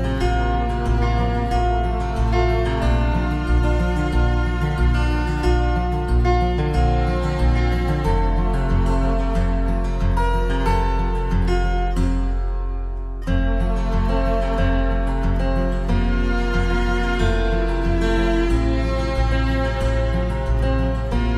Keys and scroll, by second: 10.9 ctrl+c, 11.0 ctrl+v, 16.1 ctrl+c, 16.2 ctrl+v.